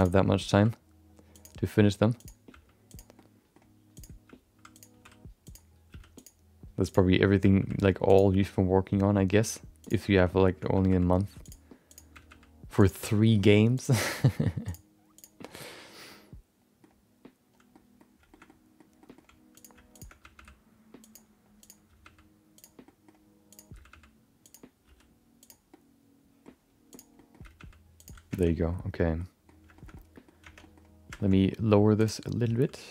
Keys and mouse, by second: 0.0 click, 0.3 middle click, 0.5 g, 1.6 middle click, 2.2 click, 2.5 g, 3.1 middle click, 3.9 click, 4.2 g, 5.0 r, 5.9 r, 6.8 click, 7.1 middle click, 7.4 g, 8.4 middle click, 9.8 click, 10.0 middle click, 10.7 g, 11.9 click, 12.1 g, 13.1 middle click, 13.7 click, 14.1 g, 15.4 middle click, 16.1 middle click, 17.8 middle click, 18.3 middle click, 18.4 middle click, 19.0 middle click, 19.5 click, 19.9 shift+click, 20.2 g, 21.6 click, 21.8 g, 22.8 middle click, 23.5 click, 23.7 g, 24.8 r, 25.7 middle click, 26.9 click, 27.1 middle click, 27.5 g, 28.5 Tab, 28.5 middle click, 29.1 middle click, 29.7 shift+middle click, 29.9 middle click, 30.4 Tab, 30.6 middle click, 31.1 shift+middle click, 31.3 middle click, 32.0 click, 32.2 middle click, 32.5 g.